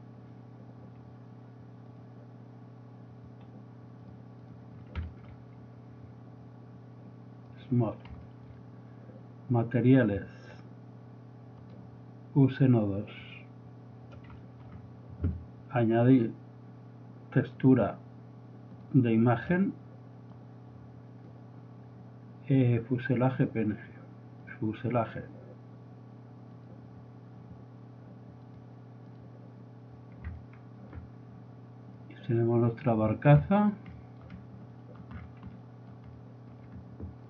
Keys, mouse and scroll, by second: 1.9-3.6 drag, 4.9 middle drag, 7.5 click, 8.3 middle click, 8.9 click, 10.3 click, 14.3 click, 14.4 middle click, 14.8-15.4 drag, 16.1 click, 20.3-22.1 drag, 23.3-25.0 drag, 25.5 click, 27.3 middle click, 28.4 click, 29.8 middle click, 30.0 middle click, 30.7 middle click, 31.0 middle click, 31.4-32.5 middle drag, 32.8-35.1 middle drag, 35.2 middle click, 35.4 middle drag, 37.0 middle click.